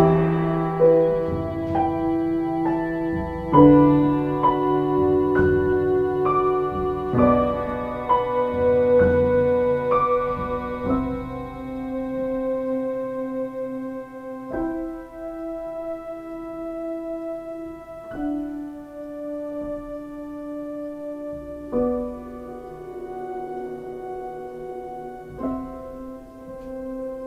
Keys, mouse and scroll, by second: 2.4 ctrl+t, 3.7 ctrl+space, 6.7 ctrl+space, 14.1 ctrl+t.